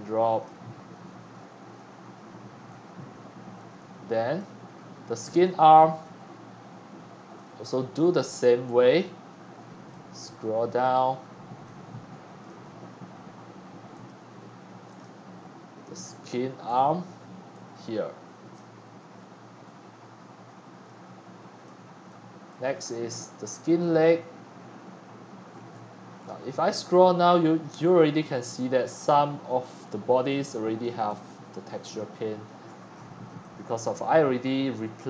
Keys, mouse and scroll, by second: 6.9-12.3 drag, 13.9 click, 14.1-16.3 drag, 21.4-24.2 drag, 25.7-26.4 scroll down 14, 26.4 scroll, 26.6 scroll, 26.6 scroll, 27.7 x, 28.2-30.8 x, 28.4 scroll, 28.5-29.2 scroll up 9, 29.2-29.7 scroll down 17, 30.8 click, 31.0-31.9 c, 32.0 drag, 32.6-33.3 middle drag, 32.6-33.3 scroll up 14, 33.9-35.0 drag.